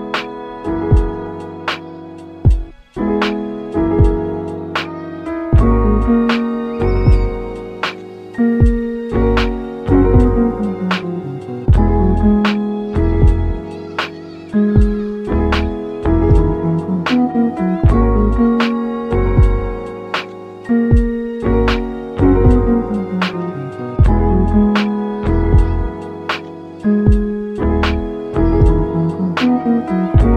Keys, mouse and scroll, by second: 1.0 scroll down 2, 1.1-1.9 middle drag, 1.9 click, 2.2-2.7 middle drag, 2.7 shift+a, 4.0 s, 6.3 Tab, 6.5-7.0 middle drag, 7.0 2, 7.4 click, 7.6-8.0 middle drag, 8.0 shift+click, 9.0 shift+click, 9.4 scroll down 2, 9.6 middle click, 10.0 e, 11.7-12.8 middle drag, 12.8 g, 13.8 Tab, 14.5 ctrl+3, 15.3 Tab, 16.1-18.0 middle drag, 18.0 ctrl+r, 19.8 ctrl+r, 21.4 middle click, 22.4 ctrl+r, 25.2 Tab, 25.4 scroll down 2, 25.5 middle click, 26.1-27.1 right drag, 27.1-27.5 middle drag, 27.5-27.8 scroll up 2, 27.8-28.7 middle drag, 28.7 s, 29.6-30.3 middle drag.